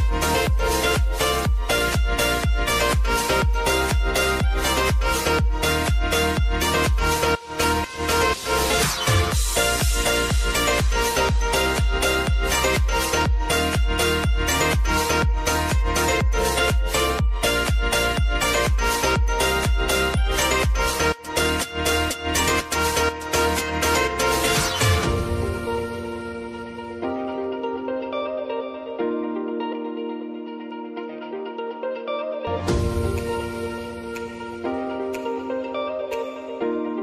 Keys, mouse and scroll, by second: 0.6 s, 1.7 click, 4.8 -, 5.8 Return, 7.4 click, 7.7 space, 9.0 click, 11.6 shift+click, 12.1 ctrl+d, 13.2-15.9 drag, 15.9 space, 17.7-20.0 drag, 21.3-24.0 shift+drag, 24.0 space, 25.1 click, 25.4 space, 26.9-30.5 drag, 30.5 space, 31.6 click, 33.5 space, 36.0 click, 36.3 space.